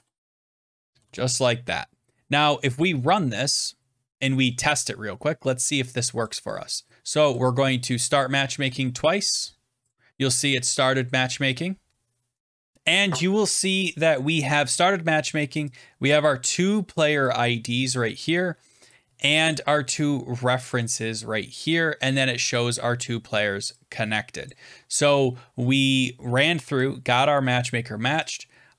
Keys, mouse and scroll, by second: 0.0-0.9 typing, 0.9 ctrl+s, 3.5 click, 4.1 click, 6.2 click, 7.2 click, 8.0 click, 8.6 click, 9.8 click, 12.7 click, 16.5 click, 16.9 click, 17.8 click, 19.4 click, 20.6 click, 23.5 click, 24.4 click, 27.6 click.